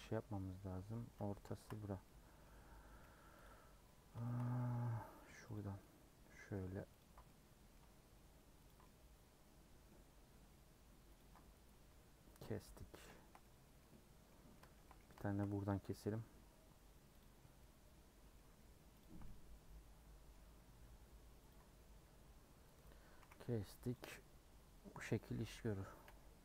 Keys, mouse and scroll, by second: 0.7 scroll down 1, 0.9 middle click, 1.1-2.0 scroll up 6, 1.5 shift+middle click, 2.0-3.4 middle drag, 3.4 click, 3.8 middle click, 4.4 scroll up 2, 5.5 click, 5.8-7.0 middle drag, 7.0 ctrl+click, 7.2-8.7 middle drag, 8.7 ctrl+click, 8.8-10.1 middle drag, 10.1 scroll up 1, 11.1 ctrl+click, 12.1-12.5 scroll down 6, 12.6-14.3 middle drag, 14.3 scroll up 1, 14.5 middle click, 15.4 scroll up 1, 15.9-17.2 middle drag, 17.2 click, 17.6-19.0 middle drag, 19.0 ctrl+click, 19.2-20.5 middle drag, 20.5 scroll up 1, 21.5 ctrl+click, 22.9 scroll down 5, 23.2 a, 23.9 u, 25.1 middle click, 26.0 /.